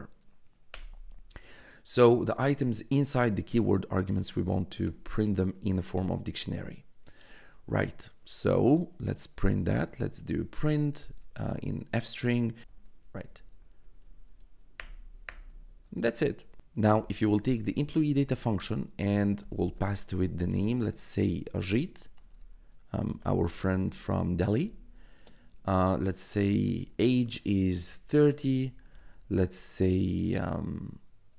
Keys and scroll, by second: 0.7 Return, 8.1 Tab, 9.2-11.5 typing, 12.6-14.5 typing, 14.7 Return, 16.6-29.4 typing.